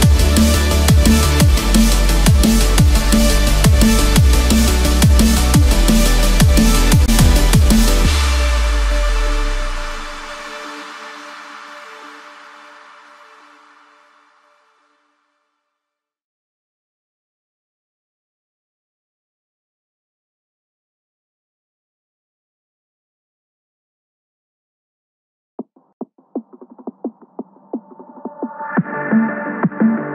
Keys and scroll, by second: 3.0 ctrl+-, 5.2 ctrl+=, 7.7 ctrl+-, 8.1 ctrl+=, 12.1 ctrl+-, 13.0 ctrl+0, 14.5 Delete, 16.4 ctrl+=, 19.6 ctrl+0, 24.9 Return.